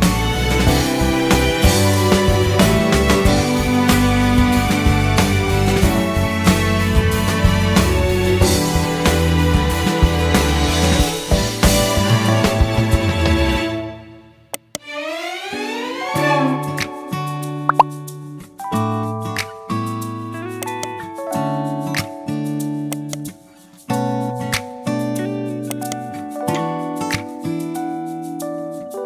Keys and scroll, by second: 0.2-3.5 typing, 3.5 Return, 3.9 ctrl+z, 4.4 ctrl+shift+q, 5.5 ctrl+l, 15.1-19.7 typing, 20.9 ctrl+z, 21.7 ctrl+x, 22.9 ctrl+v, 23.7 ctrl+u, 24.9 ctrl+z, 25.8 ctrl+z, 26.9 ctrl+z, 28.2 ctrl+z, 28.8 ctrl+g.